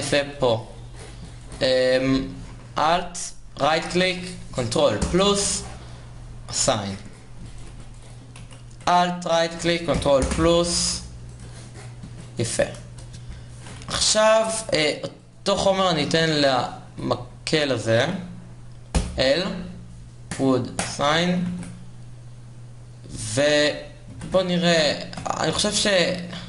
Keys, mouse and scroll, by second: 0.5 Tab, 1.6 a, 6.5 ctrl+KP_Add, 10.0 a, 11.7 ctrl+KP_Add, 13.6 Tab, 14.3 KP_0, 18.4 a, 20.5 l, 23.0 shift+z, 25.9 shift+z.